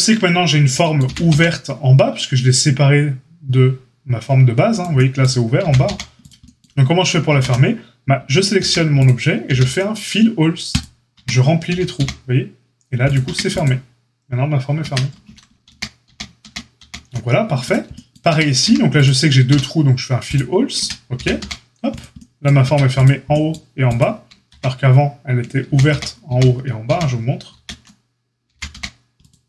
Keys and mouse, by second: 1.0 g, 5.6 g, 7.3 ctrl+z, 8.1 Tab, 8.5 a, 9.4 q, 11.1 Tab, 11.6 g, 13.2 Tab, 14.8 Tab, 15.6 ctrl+z, 16.0 ctrl+z, 16.4 ctrl+z, 16.7 ctrl+z, 18.2 Tab, 18.6 a, 19.4 q, 20.7 Tab, 21.1 g, 22.6 Tab, 23.9 click, 24.1-29.4 ctrl+middle drag, 24.4 ctrl+e, 25.6 ctrl+z, 25.8 ctrl+z, 26.3 ctrl+z, 26.9 ctrl+z, 27.5 ctrl+z, 28.5 g.